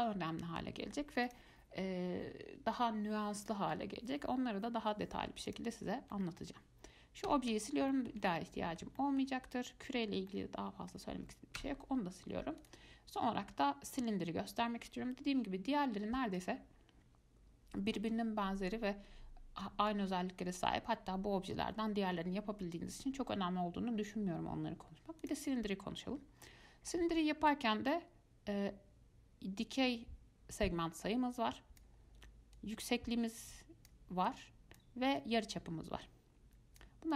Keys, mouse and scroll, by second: 1.5 click, 3.6 click, 5.7 click, 6.0 scroll down 1, 6.3-7.5 shift+middle drag, 7.5 x, 8.1-9.7 shift+middle drag, 9.7 click, 10.3 scroll down 2, 10.5-11.8 middle drag, 11.8 x, 12.8-15.8 drag, 16.6-19.6 drag, 26.6-28.1 middle drag, 28.1-31.1 drag, 32.8-37.1 drag.